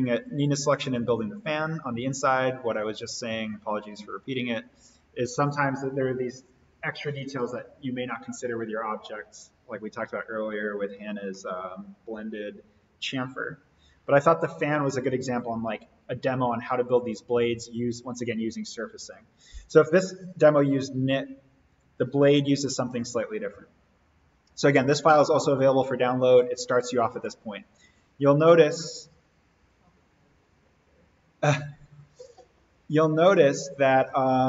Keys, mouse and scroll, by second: 17.8 click, 21.6 click, 27.7 click, 32.1 click, 33.2 right click.